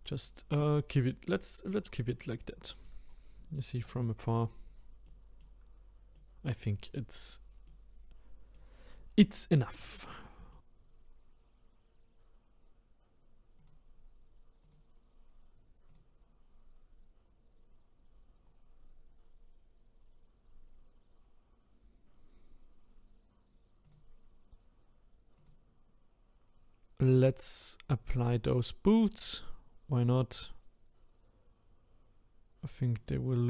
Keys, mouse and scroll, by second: 0.6 middle click, 1.3 scroll down 4, 2.4 middle click, 3.1-3.5 scroll down 3, 3.5-4.6 shift+middle drag, 4.6-5.0 scroll up 2, 5.0-9.7 middle drag, 9.7 click, 10.5 shift+middle click, 10.6-25.5 drag, 28.2 click.